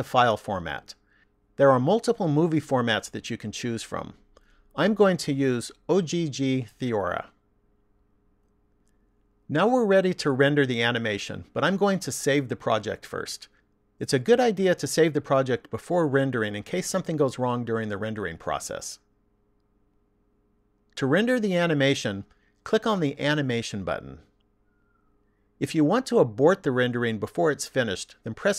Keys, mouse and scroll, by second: 1.2 click, 14.4 click, 21.2 click, 24.3 click.